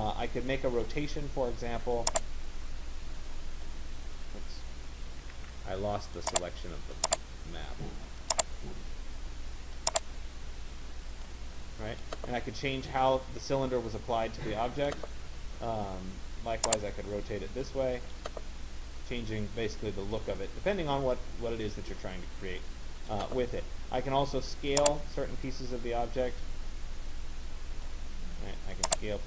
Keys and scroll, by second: 5.0 ctrl+z.